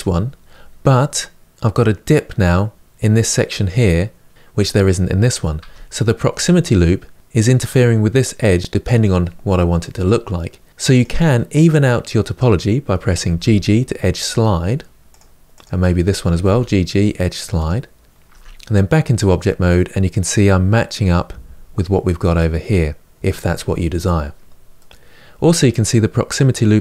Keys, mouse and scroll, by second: 5.3 Tab, 10.7 click, 13.0 g, 15.3 click, 15.9 g, 18.0 Tab, 24.5-26.8 middle drag.